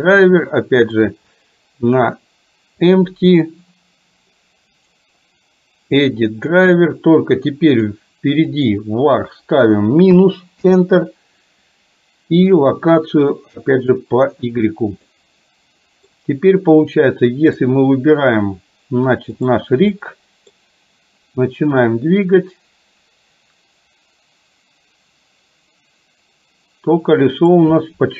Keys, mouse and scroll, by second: 4.9-14.6 right drag, 15.1-16.1 middle drag, 17.5 click, 19.5 click, 20.0 middle click, 21.8-27.6 drag.